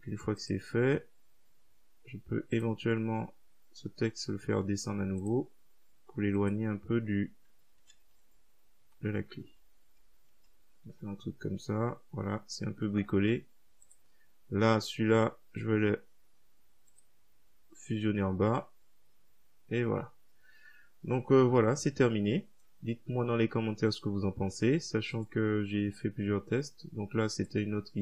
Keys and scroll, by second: 8.0-8.7 typing, 11.0 Up.